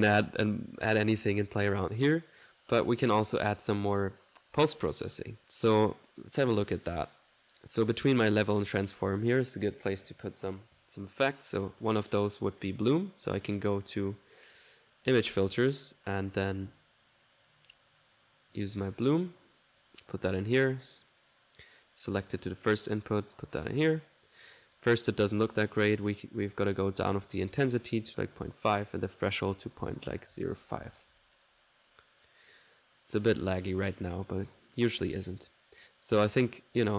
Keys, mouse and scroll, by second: 1.5 click, 2.1 click, 2.7 click, 3.6 click, 4.6 click, 5.2 right click, 5.5-8.4 drag, 7.7 middle click, 8.7 click, 12.2 click, 13.3 middle click, 15.3-16.7 drag, 16.7 middle click, 17.7-18.8 drag, 19.8 click, 20.2 middle click, 21.0-22.0 drag, 22.1 click, 22.9 click, 24.0-25.4 drag, 25.6 middle click, 25.6 scroll, 26.7 click, 29.0-32.9 drag, 33.5 click, 36.4-36.9 drag.